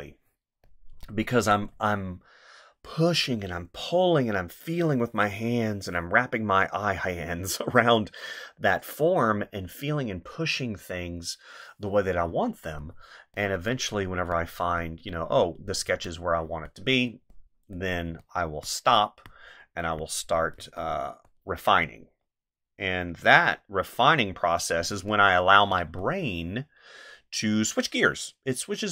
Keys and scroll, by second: 1.4 space, 12.2 space, 14.2 space, 15.8 space, 18.1 space, 20.6 space, 25.0 space.